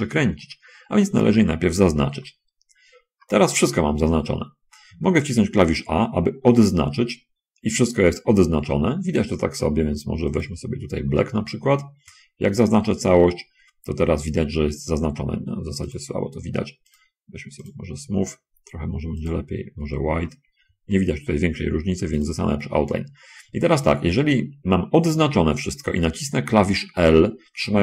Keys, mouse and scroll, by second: 0.3 shift+click, 6.8 a, 10.3 click, 12.9 a, 16.3 click, 17.3 click, 19.4 click, 20.5 a, 20.9 a, 22.5 click, 23.8 a.